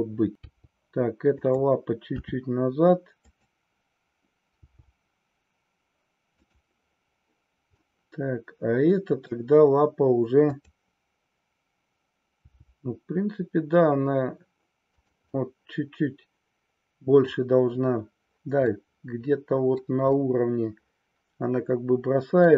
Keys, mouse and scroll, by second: 0.5 g, 1.5 click, 2.1 r, 3.4 click, 4.6 g, 6.5 click, 7.7-9.3 middle drag, 10.3-11.7 drag, 12.4 g, 15.0 click, 15.3-17.4 middle drag, 18.7 scroll up 1, 18.8-19.9 middle drag, 20.1-22.5 middle drag.